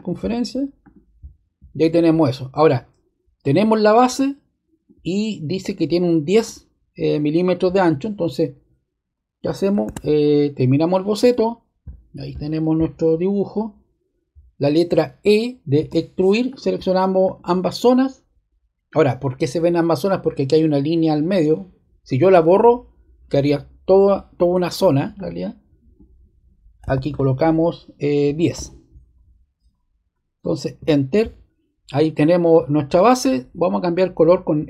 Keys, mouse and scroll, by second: 1.2 click, 4.1 click, 6.4-7.6 drag, 9.8 super+z, 10.8-12.1 drag, 15.7 e, 16.4 click, 17.2 click, 17.7 click, 25.1 click, 26.8 typing, 28.3 typing, 30.7 Return.